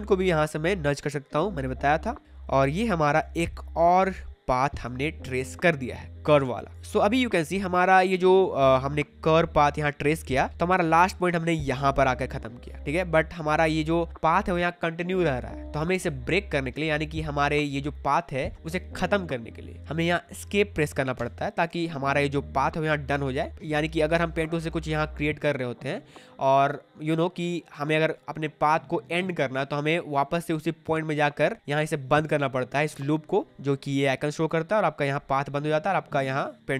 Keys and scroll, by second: 2.7 space, 21.1 Escape, 24.7 p.